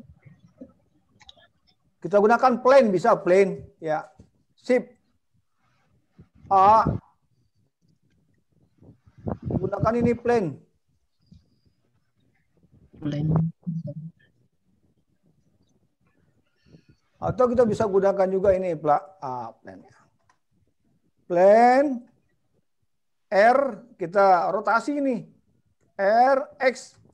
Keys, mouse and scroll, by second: 4.0 click, 26.1 r.